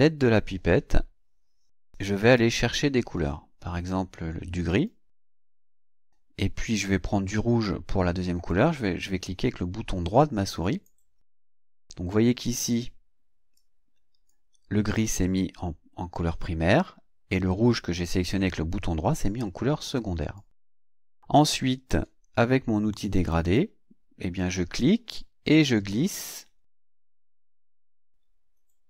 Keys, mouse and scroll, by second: 2.2 click, 4.7 click, 10.6 right click, 13.6-14.5 drag, 20.4-22.1 drag, 23.2 click, 24.4-28.8 drag.